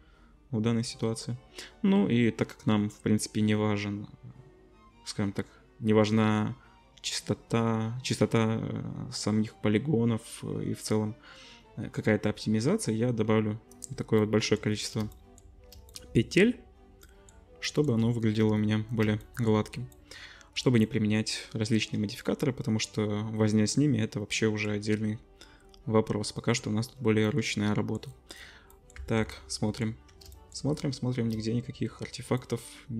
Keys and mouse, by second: 14.5 middle click, 15.0 shift+click, 15.4 middle click, 15.7 shift+click, 15.9-27.3 shift+middle drag, 27.3-28.3 drag, 28.3-32.9 middle drag, 29.0 Tab.